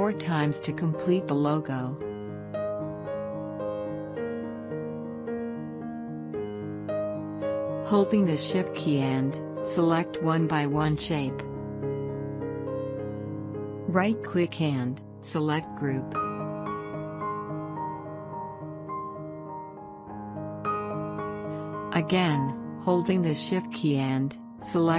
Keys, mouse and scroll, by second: 0.9 ctrl+d, 4.0 ctrl+d, 6.0 click, 10.1 click, 11.9 shift+click, 16.2 right click, 17.5 click, 19.9 shift+click.